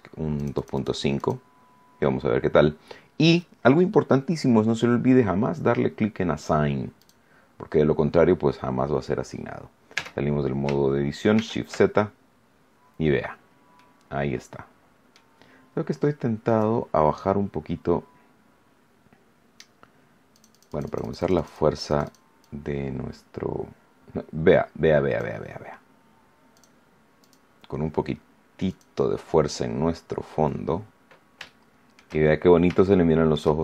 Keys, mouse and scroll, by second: 0.3 click, 1.1 click, 6.9 click, 9.9 Tab, 11.3 shift+z, 12.9-13.3 scroll down 2, 13.7-15.3 middle drag, 16.4 click, 20.3-22.3 drag, 22.3-25.3 drag, 26.5 click, 27.1 click, 28.6 click, 29.5-30.9 scroll down 6, 31.4 shift+middle click, 32.2-32.6 shift+scroll up 3, 32.7 shift+middle click.